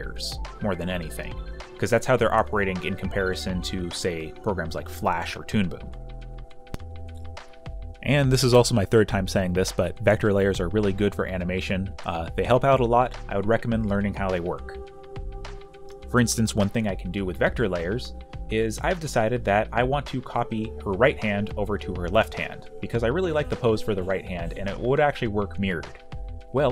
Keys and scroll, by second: 1.2-2.0 typing, 16.8 space, 25.0 space, 25.0 q, 25.4 q.